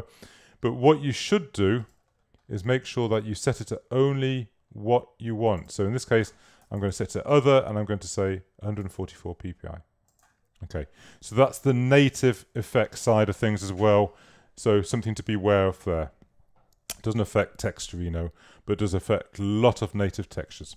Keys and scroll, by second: 6.4-7.4 typing.